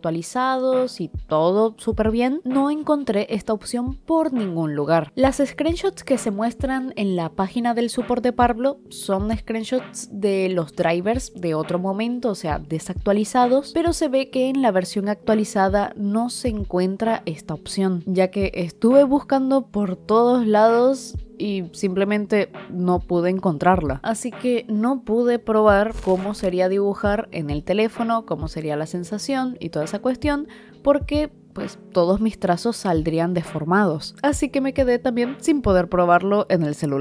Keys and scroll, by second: 27.1-31.2 typing, 33.6 i, 33.7 i, 34.3 i, 36.1 i.